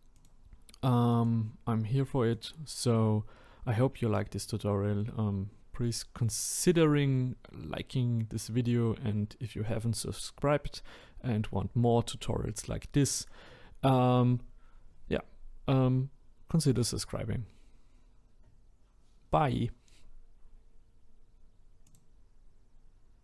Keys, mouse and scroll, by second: 0.1 click, 2.3 click.